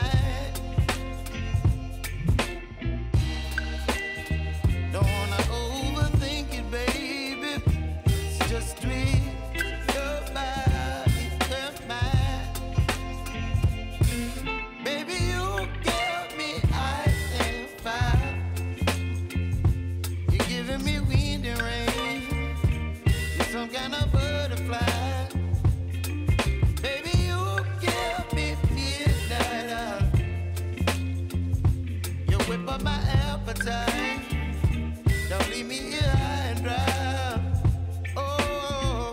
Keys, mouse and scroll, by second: 2.7 u, 3.8 click, 4.5 ctrl+d, 5.3 click, 8.4 Return, 9.0-10.3 typing, 11.6 Return, 15.0 click, 16.8 ctrl+shift+c, 17.5-19.1 typing, 20.3-21.1 typing, 21.1 Return, 23.5 click, 25.8 ctrl+z, 26.6 click, 28.9 click, 29.2 s, 30.0-35.6 drag, 38.2-38.6 typing.